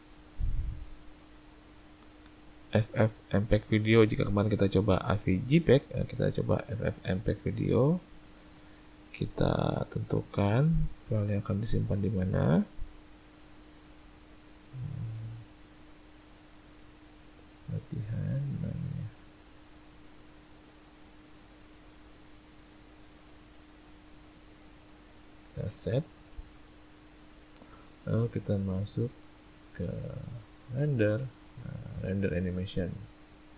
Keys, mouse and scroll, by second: 13.1 click, 30.8 click.